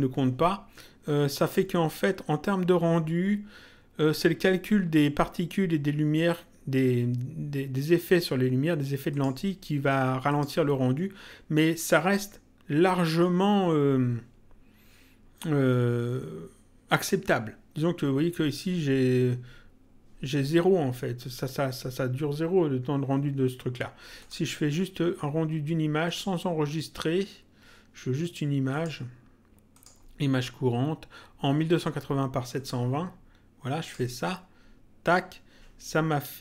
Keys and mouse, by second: 1.3 click, 9.1 click, 10.3 click, 24.1 click, 26.0 click, 28.7 click, 32.5 click, 33.7 click.